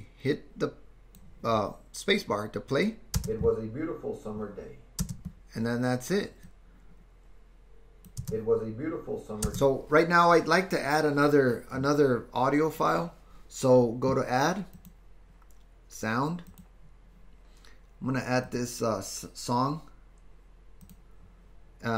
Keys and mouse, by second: 3.2 space, 5.0 space, 6.6-8.1 drag, 8.2 space, 10.2 space, 14.9-16.8 drag.